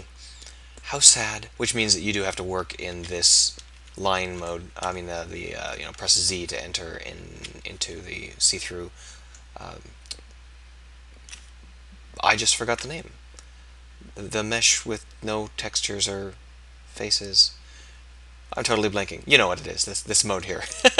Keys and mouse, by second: 2.9 z, 3.3 z, 6.0 z, 7.4 z.